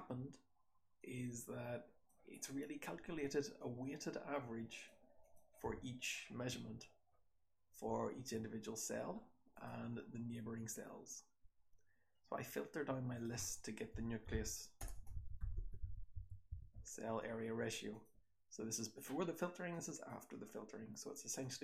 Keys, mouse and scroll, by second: 2.4-4.8 scroll down 2, 3.6-4.8 drag, 4.8-6.1 scroll down 6, 5.1 click, 5.5 h, 6.1-7.1 scroll up 2, 6.4 h, 7.1-9.5 scroll down 2, 7.1 h, 7.6 h, 18.7-19.2 scroll down 1, 19.9-20.6 scroll down 1, 20.6 scroll down 1.